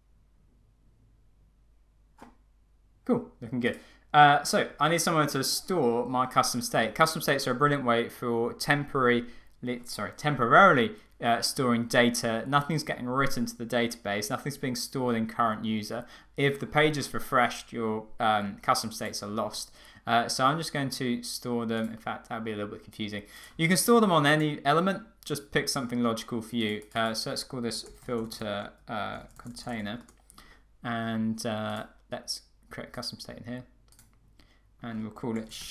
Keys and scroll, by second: 30.2 Return.